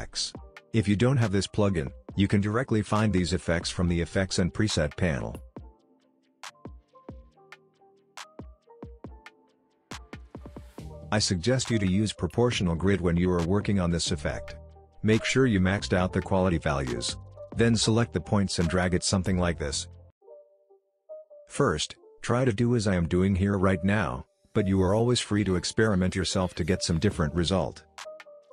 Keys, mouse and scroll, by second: 3.0 click, 4.7-6.4 typing, 8.7 click, 12.0 click, 15.9-16.5 click, 16.8 alt+scroll up 1, 17.4 alt+scroll down 1, 18.1-21.3 drag, 21.3-28.5 drag.